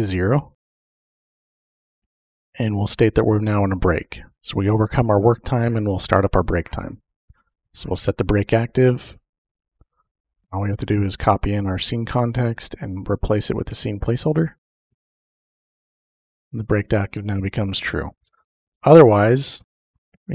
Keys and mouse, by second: 0.5 ctrl+c, 0.6 click, 1.3 ctrl+v, 1.8 space, 2.1 =, 2.2 space, 2.4 0, 2.4 Return, 7.4 click, 8.8 click, 10.2 ctrl+v, 10.3 typing, 10.7-11.9 drag, 12.2 ctrl+c, 13.4 click, 14.5-15.4 typing, 19.4 Return, 19.9-20.3 typing.